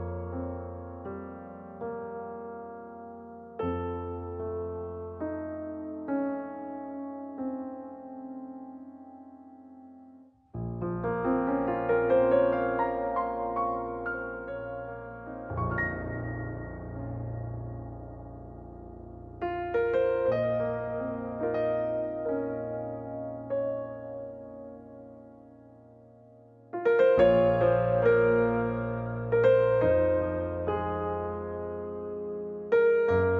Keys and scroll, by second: 2.9 space, 4.1 Escape, 4.2 Escape, 6.7 ctrl+a, 29.3 e, 33.2 space.